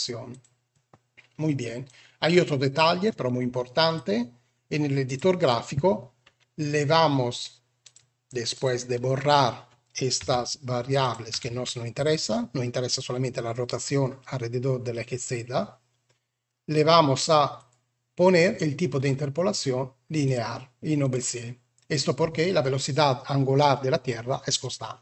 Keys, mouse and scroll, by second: 1.8-3.0 drag, 5.0 click, 7.6 click, 8.4 click, 10.1 Delete, 10.9 click, 11.2 Delete, 12.0 click, 17.4 click, 20.1 click.